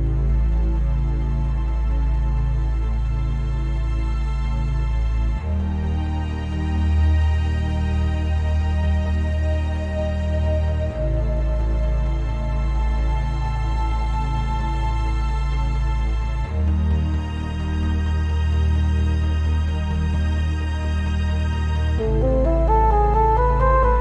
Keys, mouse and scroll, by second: 0.7 shift+right click, 0.8 shift+middle click, 1.1 c, 1.5 right click, 2.0 h, 5.5 ctrl+i, 6.5 c, 7.5 right click, 7.7 g, 10.2 right click, 10.4 Tab, 10.5 scroll up 1, 10.8-19.6 shift+middle drag, 11.5-11.8 scroll down 1, 12.3 shift+scroll down 1, 14.1 Tab, 14.8 o, 15.2 Tab, 16.1 g, 16.8 Escape, 16.9 o, 19.6 click, 20.0 click, 20.7-22.7 shift+middle drag, 20.9 scroll up 2, 21.1 g, 22.7 click, 22.9 scroll down 2, 23.2 Tab, 23.6-24.0 scroll down 2.